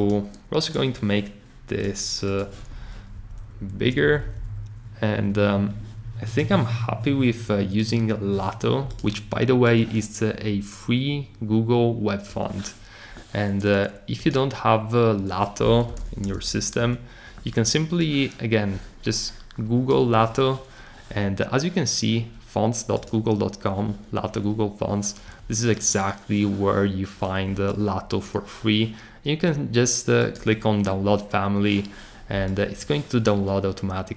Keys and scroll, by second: 3.1 shift+Up, 4.0 Down, 4.2 Down, 15.6-16.8 typing.